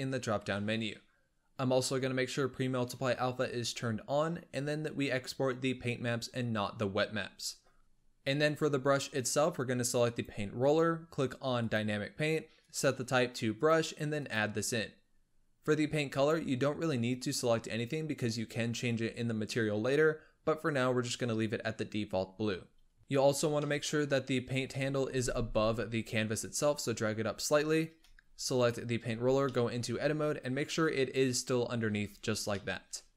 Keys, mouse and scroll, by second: 7.8 click, 9.9 click, 11.5-16.2 drag, 23.0-24.7 middle drag, 24.7 scroll up 1, 24.9 g, 28.4 click, 29.0 Tab, 29.3-31.9 middle drag, 31.9 Tab, 32.2 scroll down 2, 32.4-33.1 middle drag.